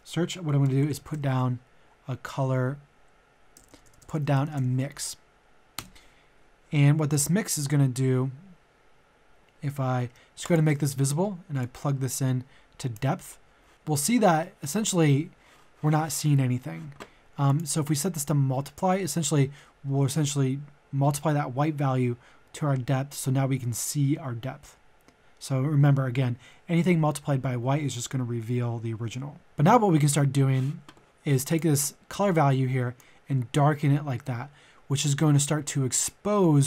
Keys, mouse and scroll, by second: 0.5-1.1 typing, 3.6-4.5 typing, 5.7 Return, 7.1-9.8 drag, 10.4-13.7 ctrl+shift+drag, 13.7-15.3 middle drag, 17.5-36.6 drag.